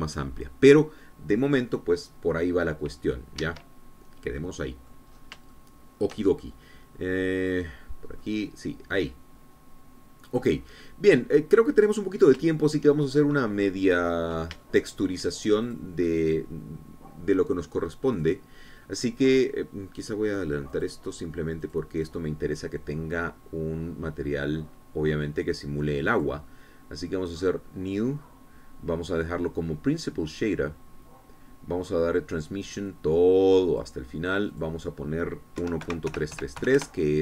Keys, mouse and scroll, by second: 4.3 Escape, 4.9 scroll down 1, 5.3 middle click, 6.1 scroll up 1, 6.5-7.5 shift+drag, 8.3 click, 9.1-11.5 drag, 11.5-12.2 scroll down 1, 12.2-13.4 drag, 13.4 shift+middle click, 14.1-14.5 shift+scroll up 1, 15.6 shift+middle click, 16.6 shift+click, 19.1 click, 21.2 click, 21.7 click, 22.6 click, 27.1 click, 28.3 click, 30.8-32.4 scroll down 5, 32.4 scroll up 2, 33.8-34.9 drag, 35.5 click, 36.5 KP_1, 36.8 KP_Decimal, 37.0 KP_3.